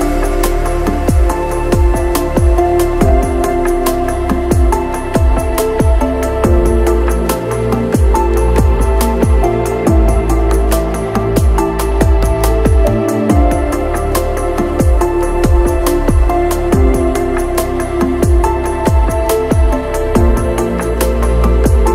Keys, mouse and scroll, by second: 0.7 middle click, 1.0 middle click, 1.4 middle click, 4.0 middle click, 5.1 middle click, 5.9 middle click, 5.9 click, 6.5 shift+click, 6.8 shift+s, 7.3 g, 7.8 click, 10.4 shift+middle click, 10.7 shift+middle click, 11.4 middle click, 12.4 middle click, 12.7 click, 13.4 right click, 14.5 middle click, 14.6 click, 14.9 shift+middle click, 15.4 shift+middle click, 16.7 shift+click, 17.7-19.3 shift+drag, 20.0 click, 20.2 shift+click, 20.5 click, 21.0 middle click, 21.1 shift+click, 21.6 middle click.